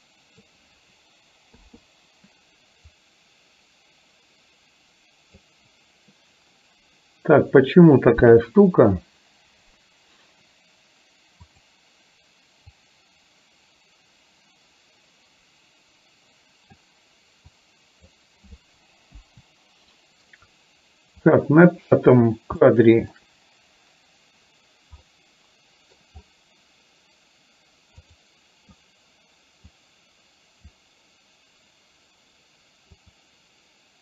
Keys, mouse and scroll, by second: 1.7 i, 3.1-5.6 drag, 11.6 click, 12.9-16.9 drag, 17.6-18.2 drag, 19.2 Delete, 22.6 shift+middle click, 25.2 middle click, 29.9-30.9 drag, 33.1 click.